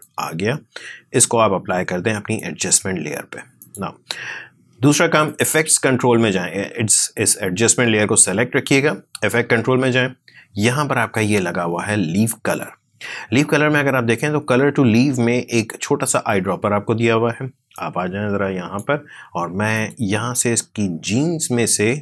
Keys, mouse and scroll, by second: 9.2-11.4 scroll down 1, 17.6-19.6 drag.